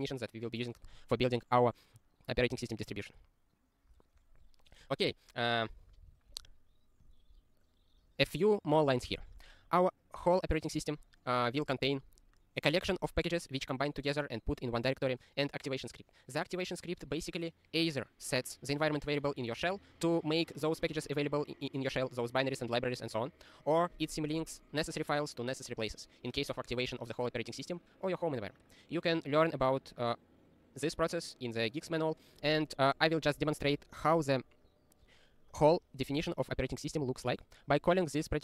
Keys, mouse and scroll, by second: 2.6 scroll down 1, 4.2 click, 6.1 ctrl+s, 7.0 click, 10.6 click, 37.1 ctrl+e.